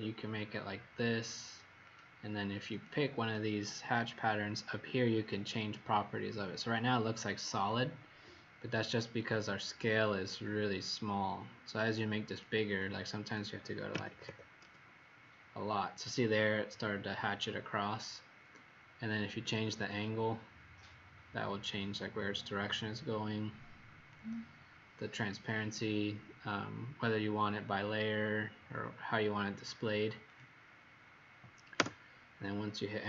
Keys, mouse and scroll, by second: 13.9 KP_5, 14.0 KP_0, 14.2 KP_0, 14.6 Return, 19.4 click, 19.9 click, 30.2 click, 31.7 Return.